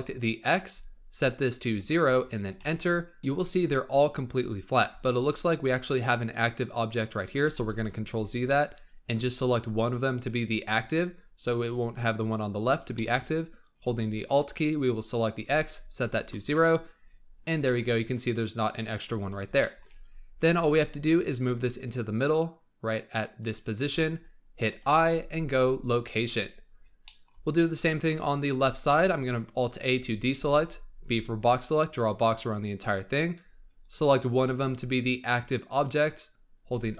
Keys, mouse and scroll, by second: 0.2-3.2 alt+drag, 3.2-3.5 shift+middle drag, 3.5-5.0 scroll up 3, 5.0-7.5 shift+middle drag, 7.5 ctrl+z, 7.8-8.4 scroll down 3, 8.4-9.1 shift+middle drag, 9.1 shift+click, 10.9-12.2 scroll down 4, 12.2-12.8 scroll up 6, 12.8-15.1 shift+middle drag, 15.1-17.2 alt+drag, 17.2-17.5 scroll down 4, 17.5-18.9 shift+middle drag, 18.9-19.5 scroll up 4, 19.5-20.3 shift+middle drag, 20.3 g, 24.7 i, 26.4-27.0 scroll down 3, 27.0-28.4 shift+middle drag, 28.4 scroll up 1, 28.6 alt+a, 29.9 scroll up 2, 30.3 b, 33.0-33.7 scroll down 1, 33.7 shift+click.